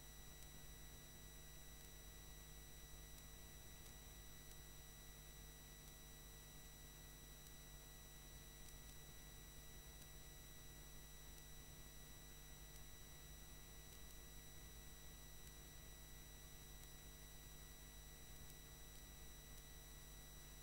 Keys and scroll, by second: 5.3 ctrl+3, 5.6 ctrl+0, 6.4 ctrl+Return.